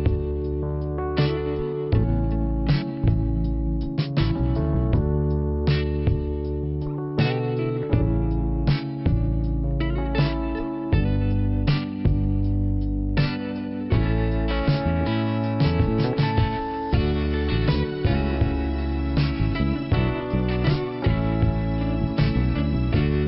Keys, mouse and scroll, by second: 0.0 alt+p, 2.8 click, 3.7 click, 5.0 click, 7.6 click, 7.8 click, 9.3 middle click, 13.9 shift+Return, 15.3 n, 16.2 middle click, 19.5 click, 20.6 click, 21.3 click, 22.9 click.